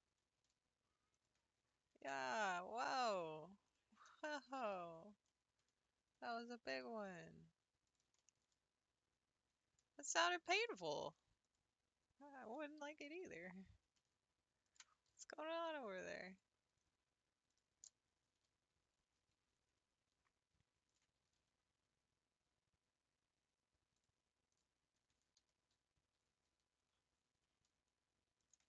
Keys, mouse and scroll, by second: 1.9 g, 6.8 s, 12.4 l, 13.1 r, 15.1 g, 17.6 click, 18.3 l, 19.0 r, 21.3 g, 24.6 click, 25.4 l, 26.1 r.